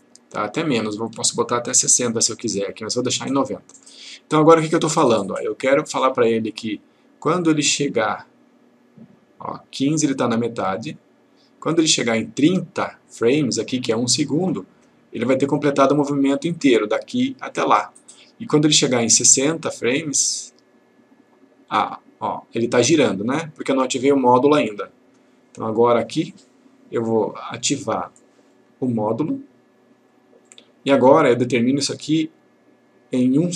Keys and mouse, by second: 0.8 click, 2.8 click, 5.4-9.8 drag, 19.2-25.1 click.